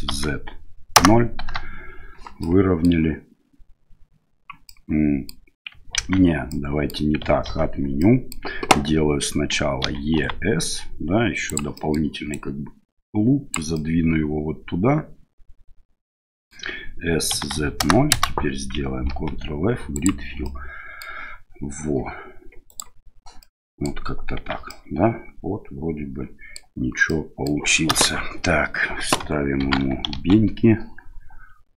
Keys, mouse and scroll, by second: 2.5 middle click, 4.7 middle click, 5.9 ctrl+z, 6.5 middle click, 7.4 ctrl+z, 8.0 middle click, 9.8 e, 11.7 middle click, 12.3-13.5 drag, 13.8-16.5 middle drag, 17.3 s, 19.1 ctrl+f, 20.4 middle click, 22.7 click, 23.4 middle click, 24.4 Tab, 24.7-26.6 middle drag, 27.1-27.5 middle drag, 27.9 KP_1, 29.6 shift+c, 30.1 shift+a.